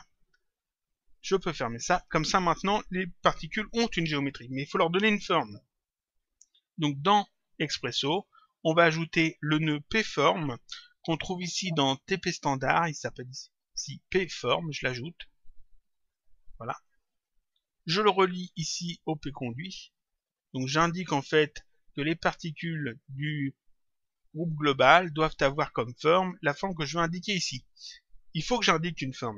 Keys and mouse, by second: 1.3 click, 6.3 click, 12.9 click, 14.9 click, 17.1 click, 19.5 click.